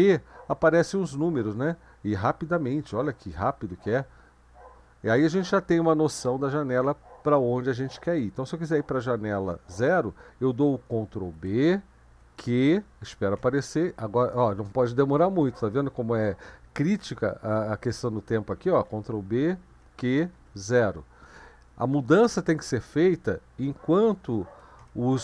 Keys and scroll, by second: 2.9 ctrl+b, 3.7 q, 11.3 ctrl+b, 12.0 q, 13.4 0, 14.5 ctrl+b, 14.5 q, 18.9 ctrl+b, 19.7 q, 20.3 0, 24.3 ctrl+b, 24.8 q.